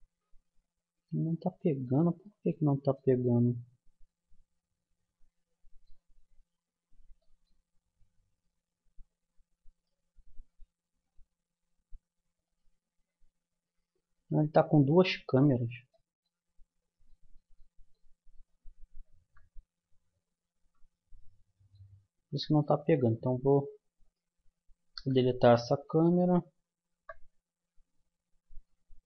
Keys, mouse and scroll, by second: 0.0 Escape, 0.5-3.5 middle drag, 10.5 right click, 11.4-12.5 middle drag, 12.5-14.3 drag, 14.5 middle click, 18.3 click, 19.2 KP_0, 20.2 middle click, 23.9-25.9 drag, 24.9 Delete, 26.9 KP_0.